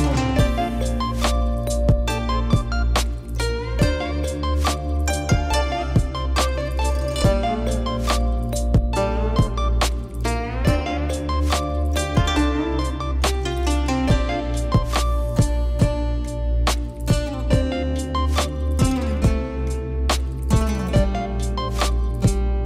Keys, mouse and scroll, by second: 0.3 click, 0.6 click, 1.9 click, 2.9 click, 4.2 click, 4.8 click, 5.0 click, 6.1-7.3 drag, 8.1 click, 8.7 click, 10.5 click, 12.7 click, 13.6 click, 14.4 click, 15.6 click, 16.4 click, 17.8 click, 18.2 click, 18.8 click, 19.5 KP_Divide, 20.3 click, 21.0 Tab, 22.4 shift+click.